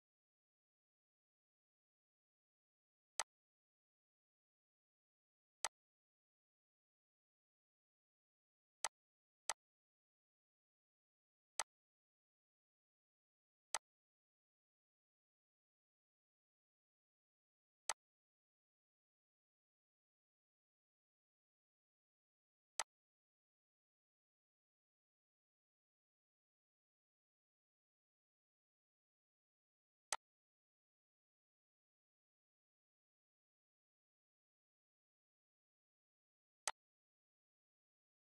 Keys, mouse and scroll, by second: 2.3 right click, 3.2 click, 3.5 right click, 5.6 click, 8.8 click, 10.2-10.7 scroll, 11.5 click, 12.4 scroll, 12.4 typing, 12.8 scroll up 1, 13.7-15.1 drag, 14.0-14.9 typing, 15.1-16.9 scroll down 1, 17.8 click, 17.9 typing, 20.0-20.3 typing, 22.4 click, 22.4 typing, 22.8-28.2 shift+drag, 29.5 alt+Num_Lock, 30.1-35.9 alt+drag, 36.2 alt+click, 36.6-38.3 shift+drag.